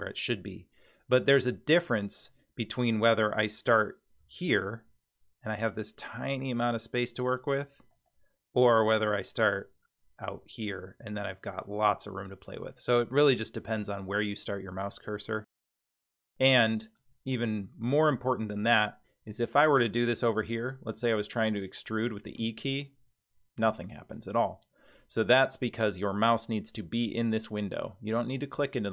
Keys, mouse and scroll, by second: 4.2 i, 7.9-10.3 scroll up 1, 10.3 i, 16.2 middle click, 22.4 e, 23.6 e.